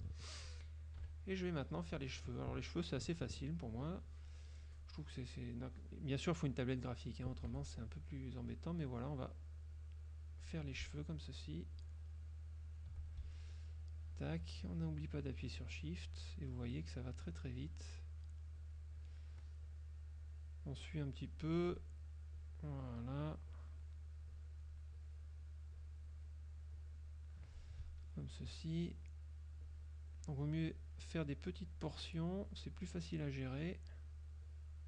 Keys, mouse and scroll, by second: 1.1 KP_Subtract, 1.8 click, 5.8 right click, 7.6 Escape, 9.2-10.8 drag, 11.9-13.1 shift+drag, 13.8 shift+click, 14.8 shift+click, 15.5 shift+click, 17.4 shift+click, 18.2 shift+click, 18.7 shift+click, 19.8 shift+click, 20.3 shift+click, 20.9 shift+click, 21.4 shift+click, 22.4-23.3 shift+drag, 23.6 shift+click, 24.4 shift+click, 25.0 shift+click, 25.8-26.6 shift+drag, 26.8 shift+click, 29.8-30.5 shift+drag, 30.8-31.4 shift+drag, 31.6 shift+click, 32.6 shift+click, 33.3 shift+click, 34.0 shift+click.